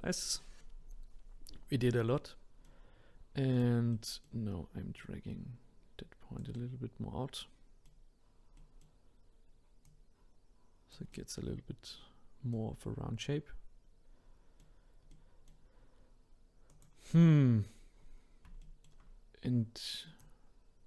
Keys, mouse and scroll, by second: 1.9-3.5 middle drag, 3.5 click, 3.9-5.0 middle drag, 5.0 click, 6.5-9.8 middle drag, 9.8 click, 11.1-16.7 middle drag, 16.7 click, 17.7-18.1 scroll up 2, 18.6-20.2 shift+middle drag, 20.2 click.